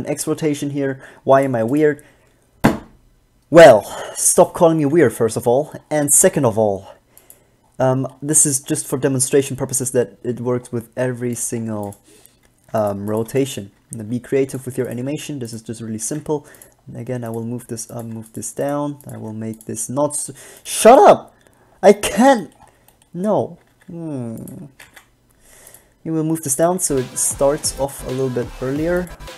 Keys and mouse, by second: 1.5 click, 5.1-7.3 middle drag, 8.2 middle click, 11.7 middle click, 12.0 b, 13.2 click, 13.4 b, 14.1 g, 15.2 g, 16.2 g, 18.2 g, 19.3 g, 23.9 g, 25.0 g, 26.5 click, 27.0 alt+a.